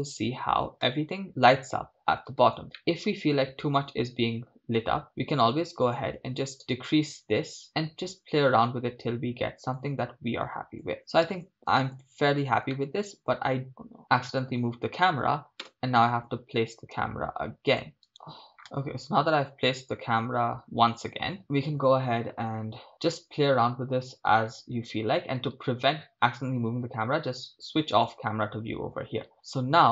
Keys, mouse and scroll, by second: 4.3 scroll up 2, 8.4-9.8 drag, 10.9 click, 11.6 shift+space, 12.9 middle click, 15.0 KP_0, 15.7 KP_0, 17.8-18.1 drag, 18.1 right click, 18.6 shift+space, 21.4 shift+space, 22.9 shift+space, 29.3-29.9 middle drag.